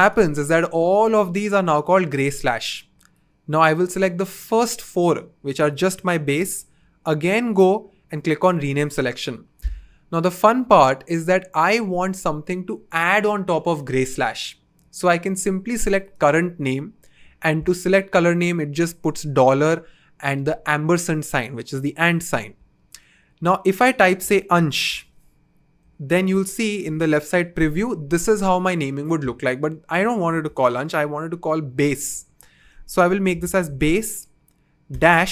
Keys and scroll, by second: 6.5 super+/, 7.7 Return, 24.2-24.6 typing, 25.8-27.5 typing, 31.6-34.9 typing.